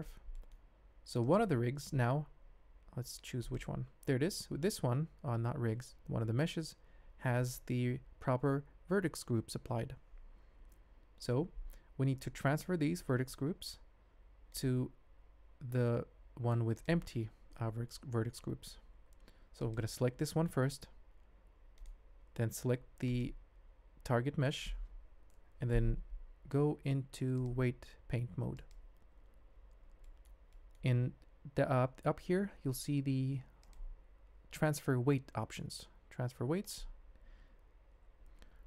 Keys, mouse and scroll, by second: 0.3 shift+click, 1.2 click, 4.1 g, 14.0 g, 14.1 click, 16.7 click, 19.6 click, 20.8 g, 27.4-28.7 drag, 30.0 shift+right click, 30.5 middle click, 33.7-37.3 drag.